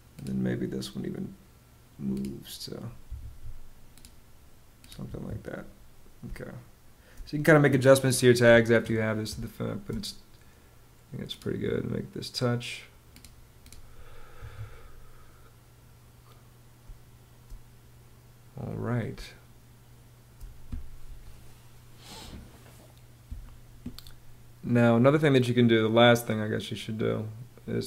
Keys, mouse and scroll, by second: 2.7 Home, 4.5 Home, 5.7 space, 8.8 space, 13.8 Escape, 16.3 space, 18.6 space.